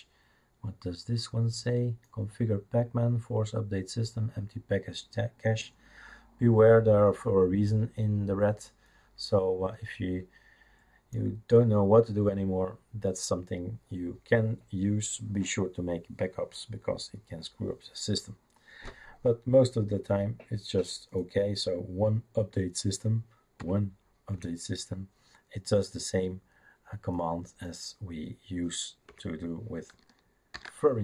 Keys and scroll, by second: 23.6 1, 24.3 Return, 29.1 Return, 30.5 ctrl+c.